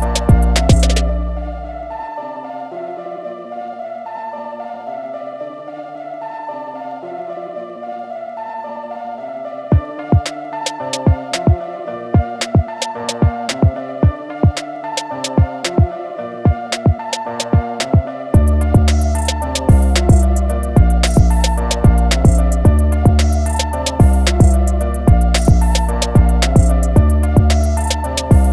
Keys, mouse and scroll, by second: 0.8 ctrl+click, 2.8 ctrl+click, 6.2 click, 7.7 alt+scroll down 1, 10.2 ctrl+a, 11.5 scroll up 1, 13.6 shift+m, 17.2 alt+click, 19.4 alt+click, 22.5 alt+click, 24.0 alt+click, 25.7 click, 27.2 click, 27.5 scroll down 1.